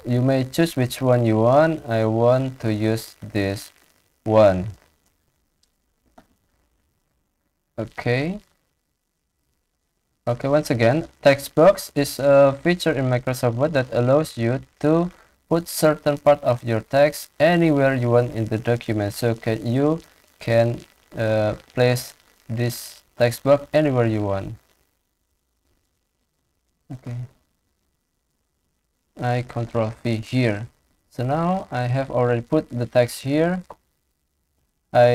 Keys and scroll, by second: 29.6 ctrl+v, 31.0 ctrl+a.